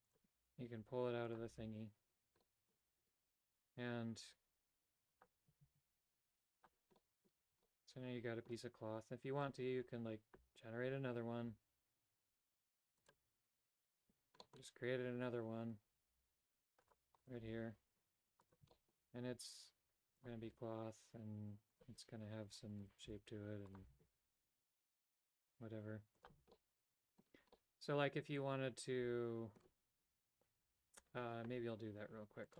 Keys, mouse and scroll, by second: 0.1 click, 0.5 g, 1.6 a, 2.4 middle click, 5.1 click, 5.5 z, 6.9 middle click, 7.4 Tab, 7.6 middle click, 9.3 right click, 12.9 click, 14.3 middle click, 16.0 g, 17.2 right click, 17.4 g, 18.7 shift+middle click, 21.7 click, 22.6 Tab, 23.0 right click, 23.3 g, 24.0 a, 24.8 Tab, 26.5 middle click, 27.5-29.6 middle drag.